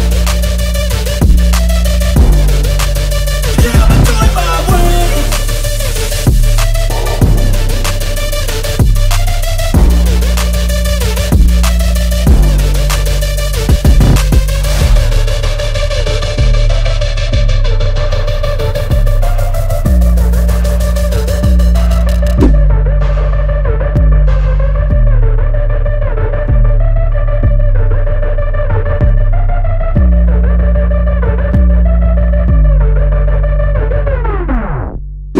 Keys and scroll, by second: 0.2 ctrl+t, 1.0 Left, 1.0 Right, 1.2 Down, 1.4 Left, 2.0 Left, 2.3 Right, 3.4 Right, 4.1 ctrl+t, 4.6 Right, 4.8 Up, 5.1 Left, 5.2 Right, 5.8 ctrl+t, 6.3 Left, 6.5 Left, 6.9 Right, 7.0 Up, 7.3 Down, 7.4 Right, 7.5 Left, 7.6 Down, 7.7 Right, 7.8 Down, 8.3 Up, 10.2 Right, 10.8 ctrl+t, 11.4 Right, 11.6 Left, 11.7 Down, 11.8 Left, 14.6 ctrl+z, 14.9 ctrl+d, 16.7 Up, 16.8 Right, 16.9 Down, 16.9 Left, 28.1 Left.